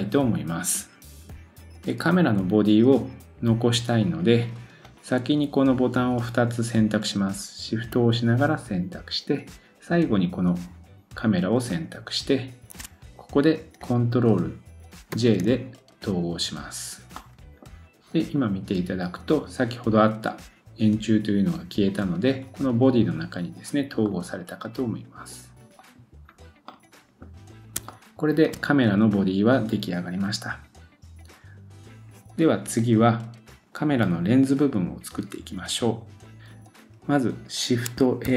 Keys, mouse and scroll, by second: 4.8 click, 8.4-11.4 shift+drag, 11.7-28.5 shift+drag, 15.1 ctrl+j, 17.2 middle click, 24.1 middle click, 25.8 middle click, 25.8 right click, 26.2-26.6 scroll down 1, 26.7 middle click, 27.9 shift+middle click, 38.2 shift+a.